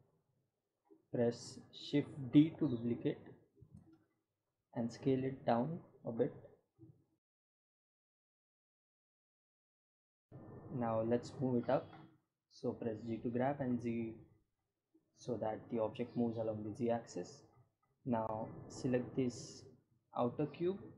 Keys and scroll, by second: 5.1 shift+d, 6.6 s, 11.4 g, 12.1 z.